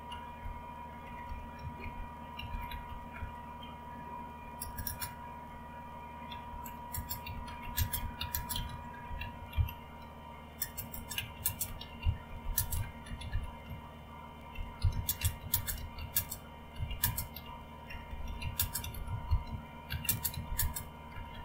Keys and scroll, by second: 0.0-3.4 typing, 4.6 space, 4.8 space, 6.2-21.4 typing.